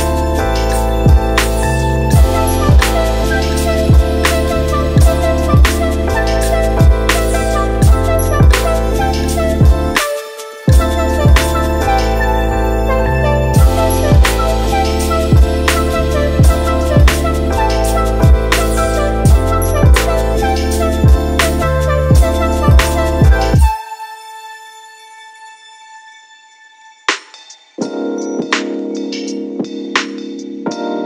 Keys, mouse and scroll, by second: 3.9 click, 4.7 g, 6.5-8.2 middle drag, 8.2 click, 8.9 click, 9.6 middle click, 10.4-12.2 right drag, 12.2-13.6 drag, 16.2 click, 17.5 KP_7, 18.2 e, 20.5 middle click, 21.2 click, 21.5 middle click, 21.7 Tab, 23.3 click, 25.3-27.3 drag, 27.3 ctrl+a, 28.0 right click, 28.8 middle click, 29.2 z, 29.7-30.2 middle drag, 30.2 click, 30.7-31.0 middle drag.